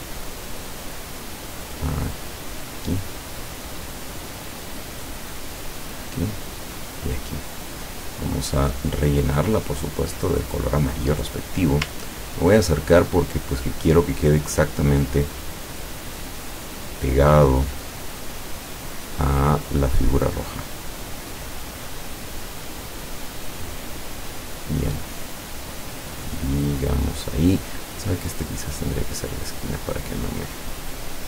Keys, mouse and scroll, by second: 2.9 click, 4.3 click, 5.9 click, 6.9 click, 8.8 click, 9.5 click, 12.1-12.5 ctrl+scroll up 2, 13.1 ctrl+click, 15.1-18.3 drag, 18.6-19.7 middle drag, 20.7-22.9 drag, 23.5-25.3 drag, 25.8-27.7 drag, 28.3 click, 31.0 click.